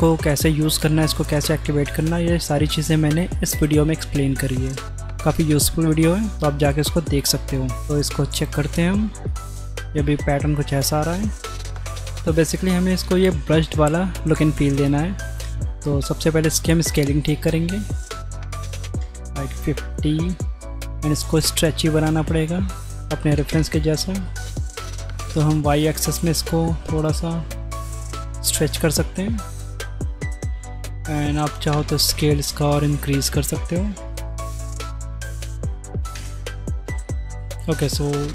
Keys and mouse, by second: 6.5 click, 7.5 click, 8.3 ctrl+shift+drag, 9.3-10.0 drag, 15.0 click, 18.1 click, 20.0 click, 22.9 click, 25.4 click, 29.0-30.1 drag, 31.0 click, 31.4 KP_0, 33.1-34.3 drag, 34.5-36.1 drag, 37.1-37.7 drag.